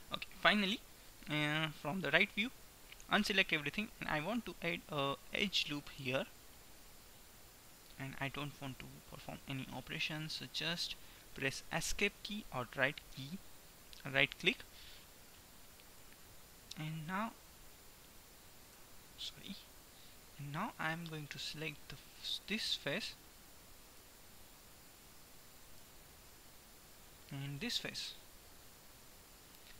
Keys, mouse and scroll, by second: 1.8 KP_3, 2.8 a, 4.4 ctrl+r, 8.8-10.3 middle drag, 14.4-16.1 middle drag, 16.1 KP_3, 18.9 KP_3, 21.9 click, 22.4-23.8 middle drag, 25.9 KP_3, 29.1-29.7 drag.